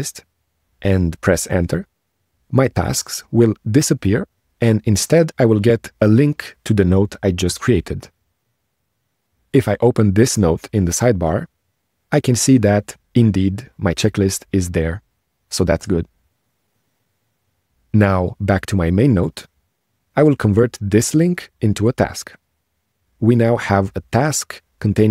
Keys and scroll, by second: 1.4 BackSpace.